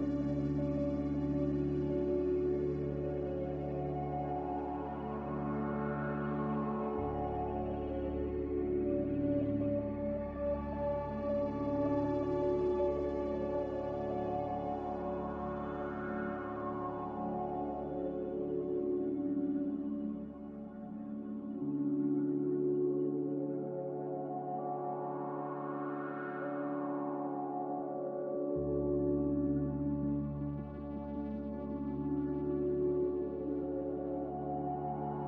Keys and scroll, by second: 20.4 5, 20.6 Return.